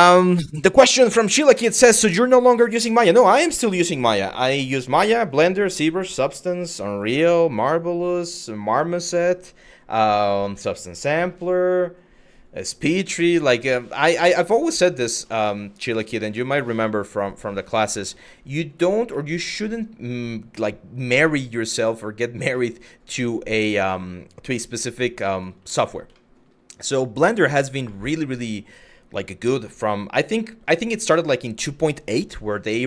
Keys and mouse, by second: 13.8 shift+middle drag, 14.7 middle drag, 15.0 shift+middle drag, 16.0 middle drag, 16.6 shift+middle click, 17.3 middle drag, 17.6 shift+middle drag, 18.1 click, 18.9 middle click, 20.3 middle drag, 20.9 shift+middle drag, 22.3 middle click, 22.8 Tab, 24.3 3, 25.0 shift+click, 25.4 middle click, 25.8 shift+middle click, 27.2 middle click, 27.6 shift+middle click, 32.5 middle click.